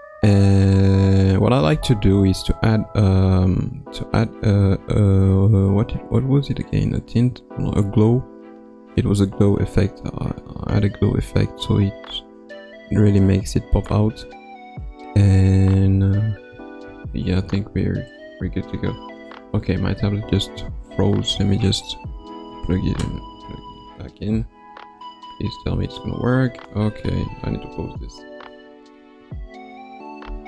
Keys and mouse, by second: 1.8 click, 4.6 click, 8.2 click, 10.0-12.4 drag, 17.2 ctrl+s.